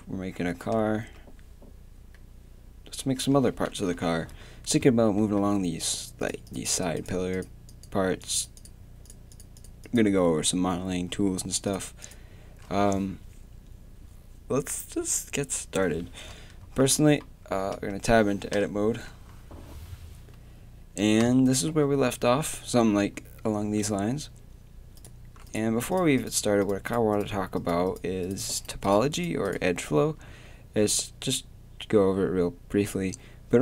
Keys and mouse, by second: 1.1 Tab, 3.7 KP_7, 5.2 middle click, 5.9-7.0 drag, 7.0 middle click, 7.1-11.0 drag, 11.2-16.4 drag, 16.6 Tab, 17.7 Tab, 18.5 Tab, 30.3 a.